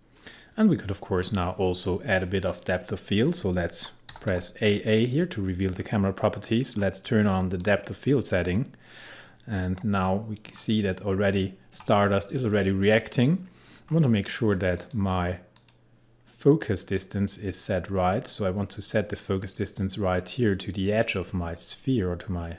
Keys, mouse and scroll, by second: 4.1 typing, 5.8-6.6 scroll down 1, 6.6-7.6 scroll up 1, 7.6 click, 10.4-12.2 scroll up 1, 13.8-14.8 scroll down 1, 14.8 click.